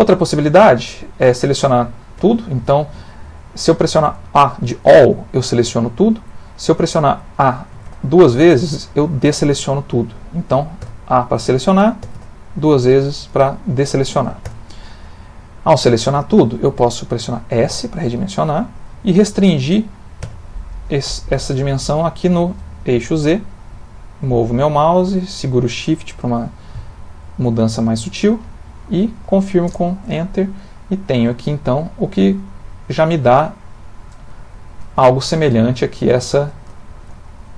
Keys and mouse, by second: 2.1 a, 7.7 a, 7.9 a, 10.8 a, 12.0 a, 12.1 a, 14.4 a, 17.9 s, 31.0 middle click, 34.5 ctrl+middle click, 35.0 shift+middle click, 35.7 ctrl+middle click, 36.2 shift+middle click, 36.8 ctrl+middle click.